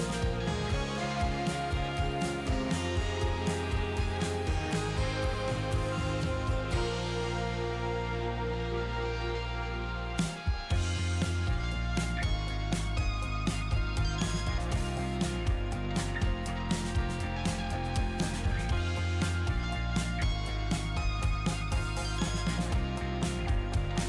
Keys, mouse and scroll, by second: 5.3-18.0 drag.